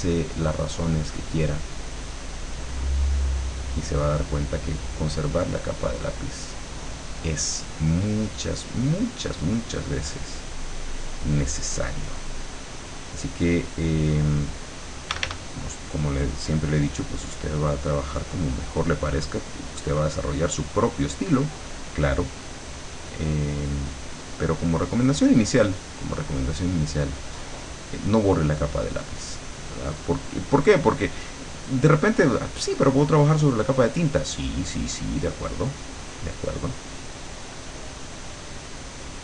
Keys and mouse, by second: 2.8 middle click, 3.4 click, 3.8 middle click, 5.6 click, 10.1-14.3 drag, 15.1 d, 16.4-38.2 drag, 38.6-39.2 drag.